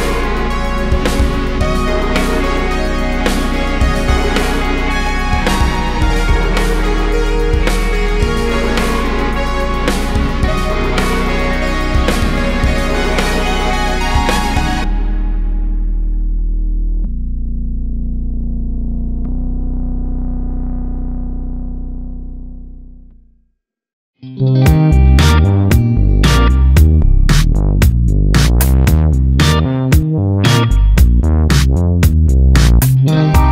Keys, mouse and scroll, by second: 0.0 a, 5.2 click, 6.4 `, 7.4 scroll down 2, 7.7 KP_7, 8.2 `, 9.6-14.5 drag, 10.7 `, 13.6 scroll up 1, 14.0 `, 16.7 click, 18.4 `, 23.6 click, 25.6 click, 25.9 scroll down 1, 26.1 `, 29.1 click, 30.9 click, 31.2 scroll up 1, 31.3 `.